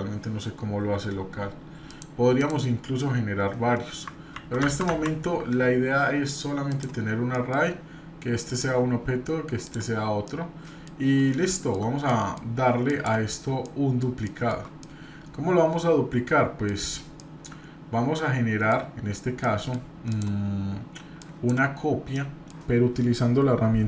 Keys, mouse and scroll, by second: 1.9 click, 2.4 click, 4.3 ctrl+z, 6.6 click, 7.3 middle click, 8.4 click, 9.6 drag, 10.2-10.9 middle drag, 11.5 shift+middle click, 12.1 middle drag, 12.9 drag, 13.6 middle click, 14.2-14.6 shift+middle drag, 14.8-16.7 middle drag, 17.2-18.7 middle drag, 19.1 scroll down 2, 19.4 middle click, 20.1 click, 21.2 drag, 22.1 middle click.